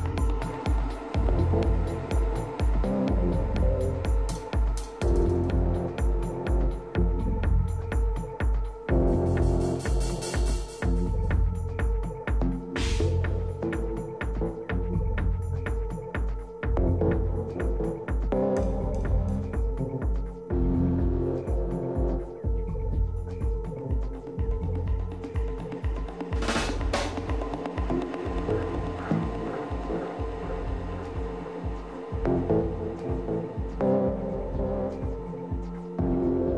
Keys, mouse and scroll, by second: 2.1-5.6 middle drag, 6.4 a, 8.4-10.4 drag, 10.5-12.7 middle drag, 12.9-14.8 drag, 13.9-17.7 middle drag, 14.8 a, 15.2 Tab, 18.9-21.3 middle drag, 21.9-23.4 middle drag, 23.4-27.4 right drag, 25.1-27.4 middle drag, 28.0 KP_3, 29.1-31.6 middle drag, 29.6 a, 30.2 z, 33.4 a, 33.6 a, 34.4 right click, 34.8-36.4 middle drag.